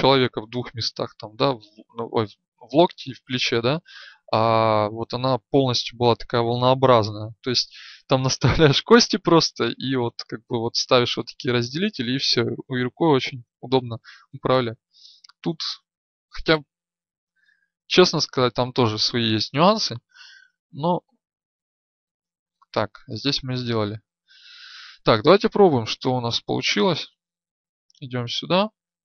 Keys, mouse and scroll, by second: 20.7 Tab, 26.7-29.0 drag, 27.5 right click.